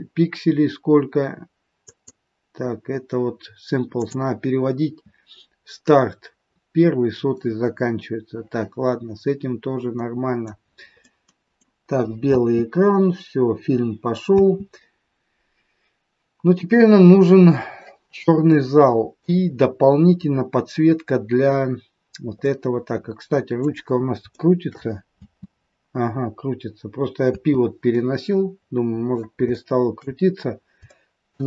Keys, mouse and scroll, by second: 1.8 click, 3.8 click, 9.1-9.5 scroll down 3, 10.0 middle click, 11.1 middle click, 12.2 space, 13.1-13.9 scroll down 2, 14.4 space, 16.9 scroll down 2, 18.4 middle click, 19.4-19.8 scroll up 6, 20.9-21.6 scroll down 2, 21.6-22.0 scroll down 1, 22.0-22.4 scroll up 2, 22.4 middle click, 24.3 shift+middle click, 25.2 space, 27.9 middle click, 27.9 space, 29.5 shift+middle click, 30.3 scroll down 2, 30.8 shift+middle click.